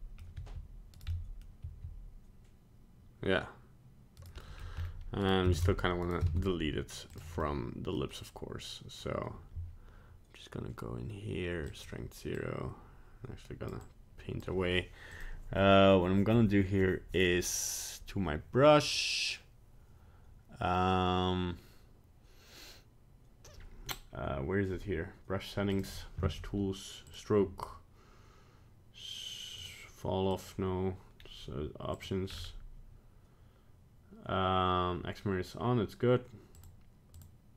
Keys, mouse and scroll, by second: 0.2 middle click, 0.4 r, 1.2 middle click, 1.7 r, 4.5 middle click, 4.8 scroll up 2, 5.3 right click, 5.6 ctrl+Tab, 6.1 right click, 6.3 ctrl+Tab, 7.4 middle click, 8.1-8.7 middle click, 8.3 middle click, 8.5 middle click, 8.9 middle click, 11.7 click, 12.4 click, 13.9 click, 15.1 click, 25.8 click, 27.1 click, 29.6 click, 30.3 click, 31.2-32.0 scroll down 1, 32.0 click, 32.3-33.2 scroll down 4, 36.6 click, 37.2 click.